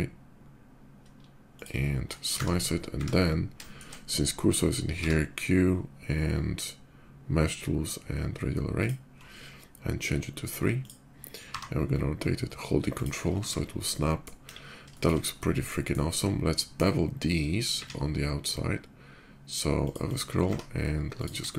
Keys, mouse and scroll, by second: 1.3 shift+click, 1.9 shift+middle click, 3.4 shift+middle drag, 8.6 ctrl+click, 9.2 ctrl+middle click, 10.6 ctrl+click, 11.2 r, 12.7 click, 13.1 shift+2, 13.4-14.0 middle drag, 14.1 KP_5, 14.6-14.9 shift+middle drag, 14.7 shift+KP_5, 15.1-15.4 middle drag, 15.6 middle click, 16.3 shift+middle click, 17.4 shift+click, 17.5 q, 19.6 click, 19.8 click, 20.1 q, 20.2 Tab, 20.9 click, 21.3 shift+click.